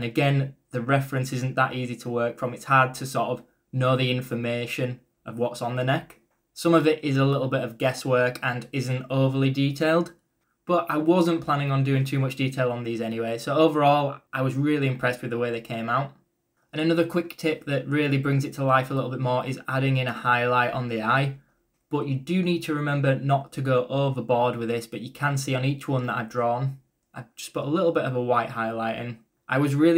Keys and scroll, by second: 12.6 e, 21.5 ctrl+z, 25.2 e, 25.7 b.